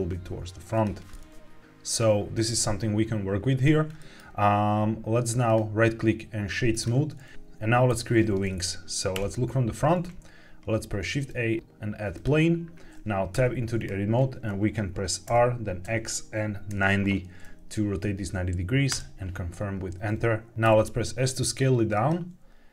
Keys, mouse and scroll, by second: 0.6 click, 0.8 Tab, 1.0-3.6 middle drag, 3.9 shift+middle click, 5.4-6.8 right drag, 9.0 KP_1, 11.0 shift+a, 13.2 Tab, 15.2 r, 15.7 x, 16.6 KP_9, 16.7 KP_0, 18.8 KP_Enter, 20.6 s, 21.8 click.